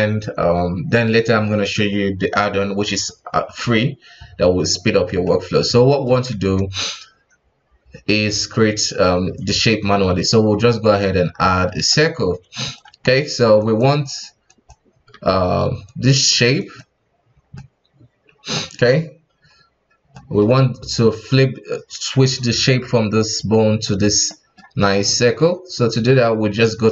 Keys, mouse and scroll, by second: 5.2-5.9 shift+middle drag, 5.9 click, 6.3 shift+a, 11.5-12.1 middle drag, 12.1 s, 12.9 KP_1, 13.6 right click, 14.0 right click, 14.5 right click, 15.1 ctrl+Tab, 15.8 right click, 16.2 right click, 16.6 right click, 17.3 scroll down 1, 17.5-19.3 middle drag, 19.3 KP_1, 20.1-23.1 middle drag, 24.2-26.6 middle drag, 26.6 click.